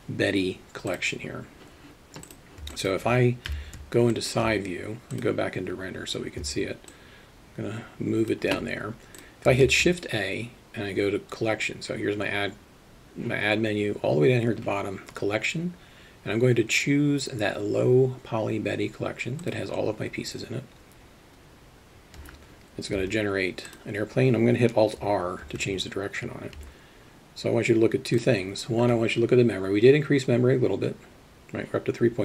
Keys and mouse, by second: 2.3 click, 2.7 alt+middle click, 3.5 KP_3, 4.2 alt+shift+middle drag, 7.0-8.4 alt+shift+middle drag, 9.7 shift+a, 23.0 g, 25.7 alt+r, 27.0 g.